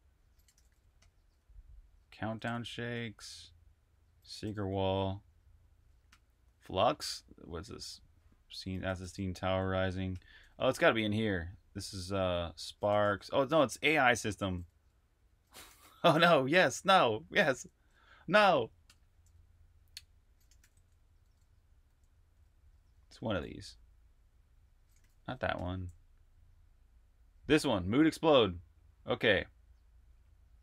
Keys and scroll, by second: 0.0-5.0 typing, 5.9 Return, 8.4-9.9 typing, 11.2-13.1 typing, 14.1-18.7 typing, 20.0-22.9 typing, 24.4-25.4 typing.